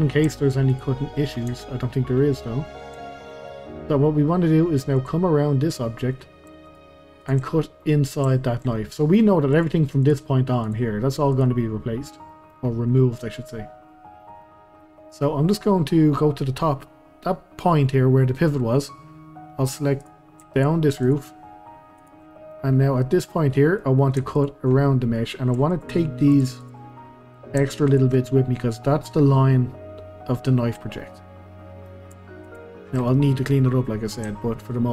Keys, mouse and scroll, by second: 0.7 click, 1.2 middle click, 1.5 Tab, 1.8-2.2 scroll up 2, 2.2-5.0 middle drag, 5.0 click, 5.3-6.6 middle drag, 6.6 shift+click, 7.2 shift+click, 7.5-9.5 middle drag, 9.5 click, 10.0 click, 10.6 click, 11.3 click, 12.0 scroll up 1, 12.3 middle click, 12.7 scroll down 1, 12.9 middle click, 13.7-14.0 scroll up 1, 14.0-14.4 scroll down 1, 14.4-20.0 middle drag, 20.0 click, 20.5 shift+click, 21.0 shift+click, 22.0 shift+click, 22.3-22.7 middle drag, 22.7 scroll up 2, 23.0-24.3 middle drag, 24.3 ctrl+click, 24.8 middle click, 25.7 shift+click, 26.3 shift+click, 26.6 shift+click, 26.9-27.9 middle drag, 27.9 shift+click, 31.0-32.5 middle drag, 32.5 shift+click, 33.5-34.9 middle drag.